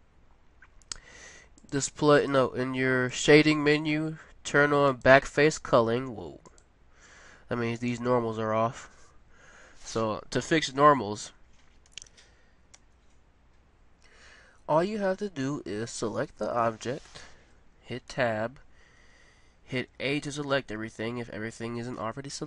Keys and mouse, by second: 10.8 Tab, 11.8 a, 12.7 a, 16.2-17.5 right drag, 18.1 Tab, 19.1 a, 19.9 a.